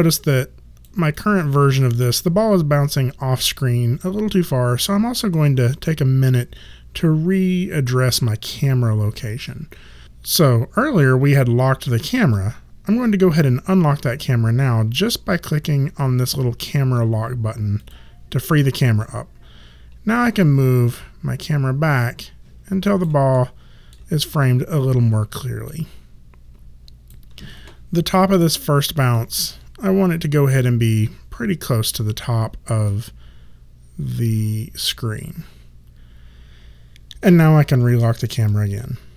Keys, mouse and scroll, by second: 11.3 click, 17.8 click, 20.1 alt+right click, 23.3 alt+middle click, 24.1 alt+click, 25.6 alt+right click, 29.0 click, 38.4 click.